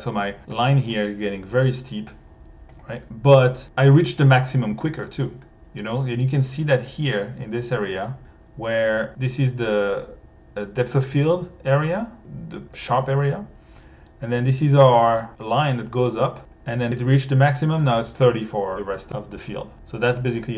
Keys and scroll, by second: 0.5 1, 2.7 1.